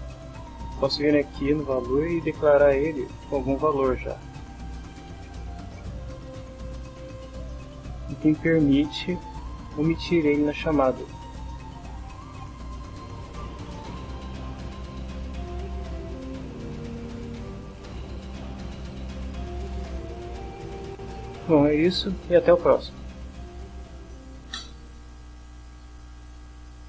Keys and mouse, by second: 2.9-5.7 typing, 7.0 Down, 7.7 Down, 8.2 Down, 9.0 End, 9.3 Left, 10.8 BackSpace, 11.4 BackSpace, 12.4 F6, 14.1 click, 15.3 click, 20.6 click, 21.2 click.